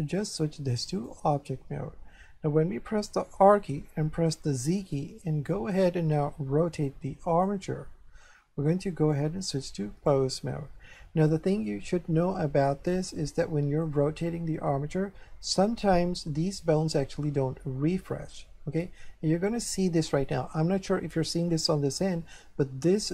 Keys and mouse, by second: 0.2 click, 3.4 r, 4.5 z, 7.3 click, 9.1 click, 11.0 shift+middle click, 13.3 shift+middle click, 15.7 middle click, 21.2 shift+middle click.